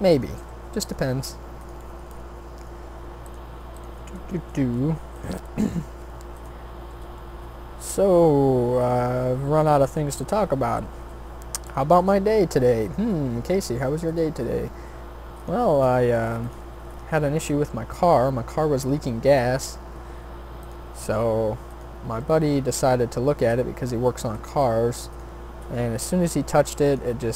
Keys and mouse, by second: 0.4 g, 1.2 s, 4.4 shift+d, 5.6 r, 6.8 e, 9.2 s, 11.0 e, 13.3 s, 14.3 e, 15.8 s, 17.4 e, 19.9 s, 20.9 e, 23.1 s, 24.6 g, 25.7 e.